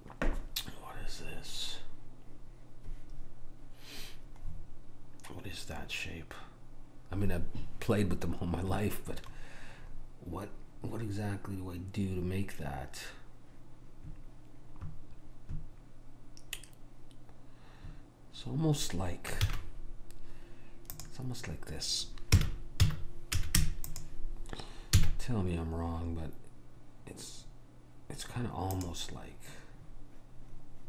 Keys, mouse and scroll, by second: 4.6-8.9 middle drag, 9.4-10.0 scroll up 1, 10.0-11.6 scroll up 1, 11.6-13.9 middle drag, 19.5 shift+a, 22.4 r, 25.0 s.